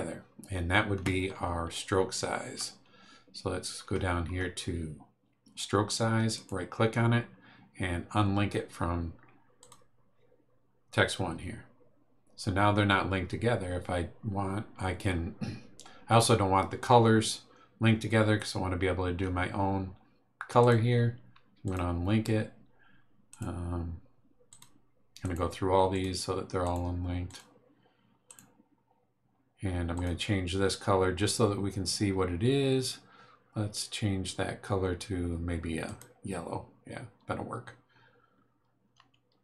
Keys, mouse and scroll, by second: 1.9 scroll down 1, 2.5 scroll down 1, 3.8 scroll down 1, 6.3 right click, 9.6 click, 20.6 right click, 21.6 click, 23.3 right click, 24.5 click, 25.2 right click, 25.9 click, 26.6 right click, 27.2 click, 28.3 right click, 29.9 click, 35.8 click.